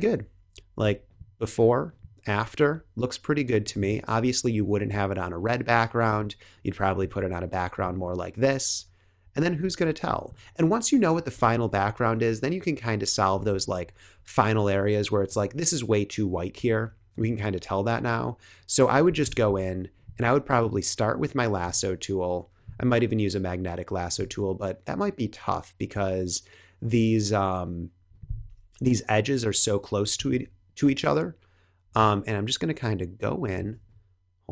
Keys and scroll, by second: 6.0 space, 9.6 space, 11.6 super+=, 12.9 super+=, 13.6 space, 19.1 l, 33.6 space.